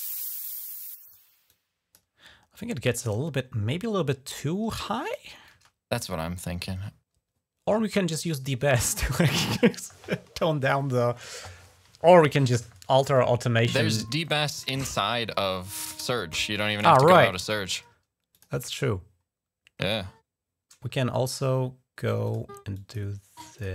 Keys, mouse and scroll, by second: 1.3 click, 2.8 middle click, 4.8 click, 5.4 space, 14.0 click, 15.0 scroll down 1, 15.7 space, 16.1 click, 17.2 d, 18.1 click, 18.2 typing, 22.0 click, 22.2 click, 22.5 click, 23.3 click.